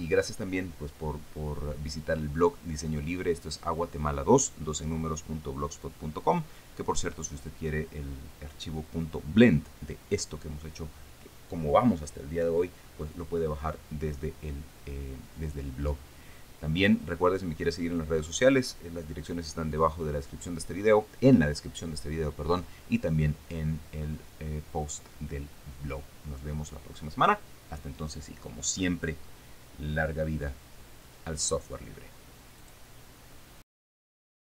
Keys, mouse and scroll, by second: 33.2 click, 34.3 click.